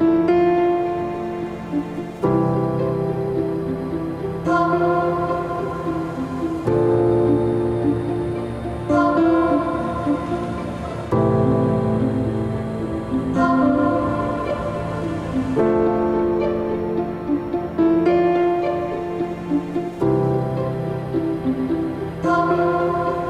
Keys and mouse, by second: 0.4 shift+middle drag, 0.6-1.0 shift+middle drag, 1.4-5.0 drag, 5.0-5.6 middle drag, 6.5 ctrl+s, 15.7-17.4 middle drag, 20.2-23.0 middle drag.